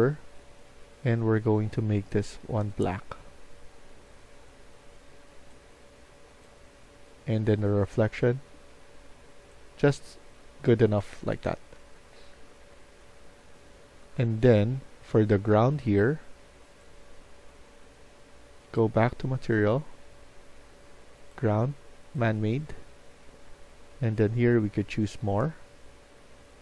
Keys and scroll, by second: 10.4 Escape, 10.7-12.9 typing, 13.9-15.4 typing.